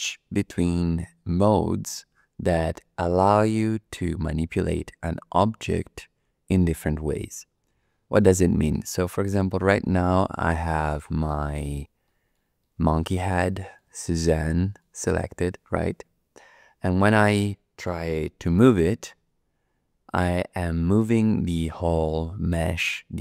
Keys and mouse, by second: 8.7 click, 9.2 click, 9.4 middle click, 9.9 shift+middle click, 10.5 click, 11.3 shift+click, 12.0 middle click, 12.1 click, 12.2 middle click, 12.6 shift+click, 13.4 middle click, 13.6 click, 14.5 shift+click, 14.7 shift+middle click, 19.1 g.